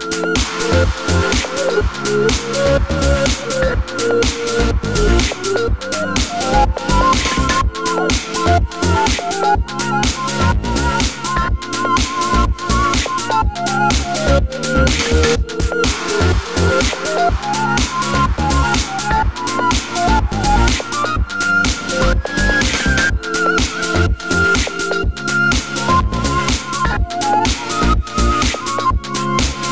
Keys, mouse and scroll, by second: 0.1-1.3 drag, 0.4 g, 1.3-9.5 middle drag, 1.7-2.3 scroll down 2, 4.7 KP_7, 7.9 KP_3, 9.5 scroll up 1, 9.7 Tab, 10.0 2, 10.3-11.6 drag, 11.6 middle click, 12.0 click, 12.1 middle click, 13.0 click, 13.8-15.0 middle drag, 15.0 ctrl+click, 15.4 middle click, 15.9 3, 16.1 click, 17.0 middle click, 17.6 shift+click, 18.1-23.8 middle drag, 22.7 shift+d, 22.8 Return, 23.3 Tab, 23.8 click, 24.0 Tab, 24.2 middle click, 25.5 Tab, 26.1 x, 26.3 click, 26.4 Tab, 26.6 middle click, 26.8 a, 26.9 middle click, 28.2-29.7 drag, 29.5 ctrl+z.